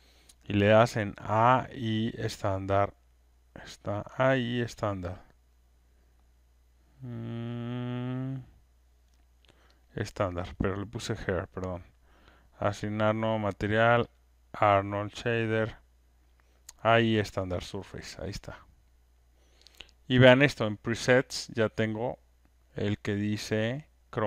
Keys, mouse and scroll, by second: 9.8 click, 12.7 right click, 14.1 click, 17.0 click.